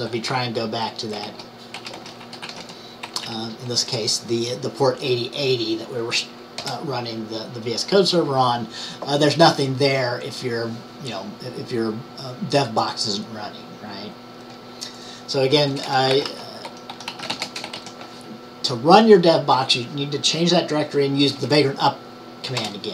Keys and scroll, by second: 0.2-3.3 typing, 16.1-18.3 typing.